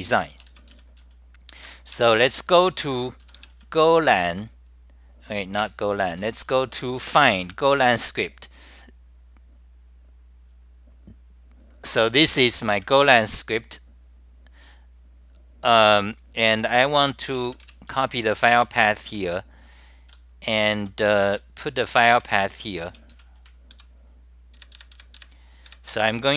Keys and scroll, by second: 10.9-11.7 typing, 13.2 =, 18.0 Home, 18.7 w, 20.2 c, 21.3 t, 22.9-24.7 typing, 24.9 super+].